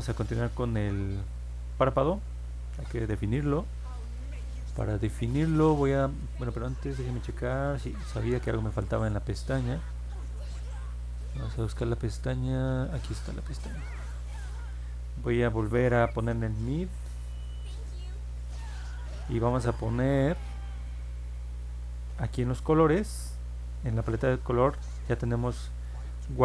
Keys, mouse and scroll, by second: 0.1-0.6 scroll up 4, 1.6 alt+middle click, 9.5-10.0 scroll down 2, 10.7 middle click, 10.7 scroll down 2, 11.5 middle click, 11.5 scroll down 2, 12.9 click, 18.0 click, 20.7 click, 22.5 click, 24.0 click, 26.1 click.